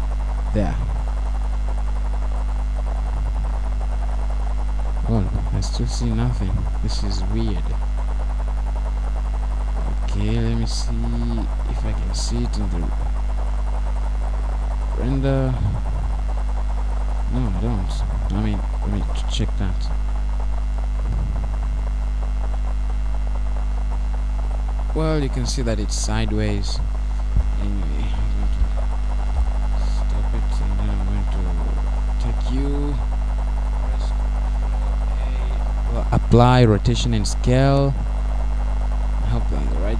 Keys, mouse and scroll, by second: 3.4 click, 4.0-4.5 scroll down 1, 4.5-5.1 scroll down 1, 5.7 click, 9.8-10.5 scroll down 2, 10.5-11.1 scroll up 1, 11.1-11.6 scroll up 1, 11.6-12.1 scroll up 1, 12.5 scroll up 1, 13.4-14.4 scroll up 4, 14.4-15.2 scroll up 1, 15.2-16.8 scroll up 1, 22.0-22.4 scroll down 4, 22.4 middle click, 35.2 Escape.